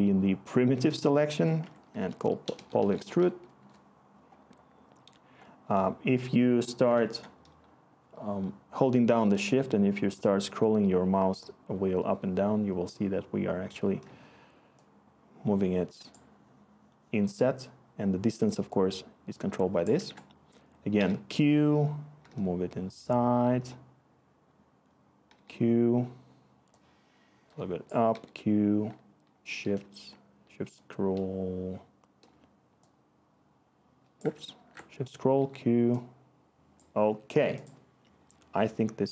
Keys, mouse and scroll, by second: 1.6 Tab, 2.0-3.6 typing, 19.9 ctrl+z, 20.9 q, 25.3 q, 28.1 q, 34.5 ctrl+z, 35.3 q.